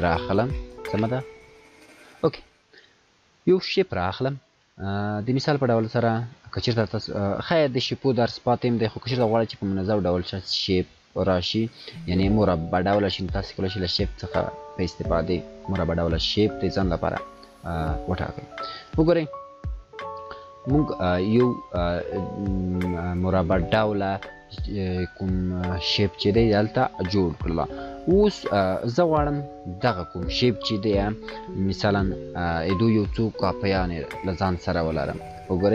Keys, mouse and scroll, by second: 0.0 click, 2.8 click, 5.1-11.3 drag, 16.6 click, 34.5 ctrl+0.